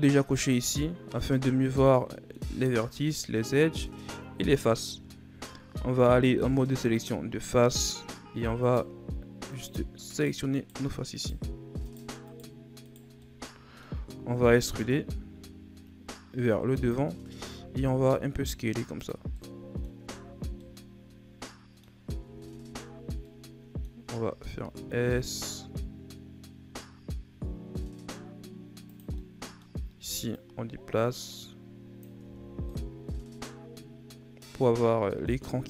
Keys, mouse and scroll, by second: 0.4 click, 1.8 middle click, 2.7-5.7 shift+scroll up 3, 5.7 ctrl+Tab, 7.7 right click, 8.6 shift+right click, 9.5 shift+right click, 10.1 shift+right click, 10.5 shift+right click, 11.1 shift+right click, 11.9 shift+right click, 12.3 shift+right click, 12.8 shift+right click, 13.3-14.6 middle drag, 14.6 e, 19.4 middle click, 20.0 Tab, 20.4 scroll down 2, 20.6-22.0 middle drag, 22.0 scroll up 1, 22.2 Tab, 23.0 scroll up 1, 23.2-24.2 middle drag, 24.2 s, 29.1-30.3 middle drag, 30.3 click, 32.2 Tab, 32.5 scroll down 1, 32.7-35.5 middle drag, 35.5-35.6 scroll up 1.